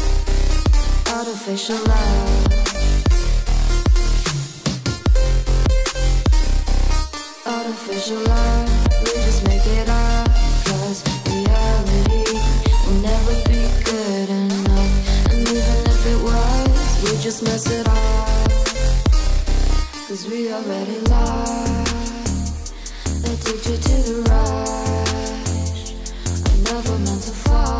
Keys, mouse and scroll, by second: 0.0-2.3 typing, 0.3 scroll down 1, 0.7 click, 0.9 Return, 2.9 click, 3.1-3.6 scroll down 1, 3.8 click, 5.2 Return, 5.4-5.9 scroll down 1, 6.1-13.7 typing, 6.2 Down, 6.4 Return, 12.2 Return, 14.0 ctrl+s, 14.7 click, 14.8 ctrl+=, 16.1 click, 16.4 Return, 17.0-22.7 typing, 18.8 Return, 20.3 Return, 21.6 ctrl+s, 21.7 click, 22.0 scroll up 1, 22.3 click, 22.6 click, 22.9 scroll down 1, 23.1 click, 23.6 scroll up 1, 24.6 click, 24.8-27.7 typing, 26.4 click.